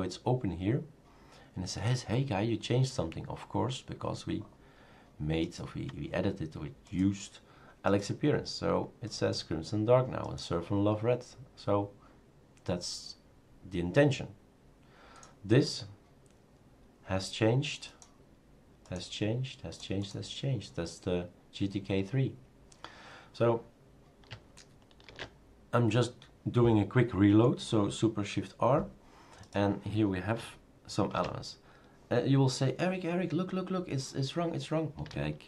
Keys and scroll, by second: 25.1 shift+super+r, 31.1 shift+super+q.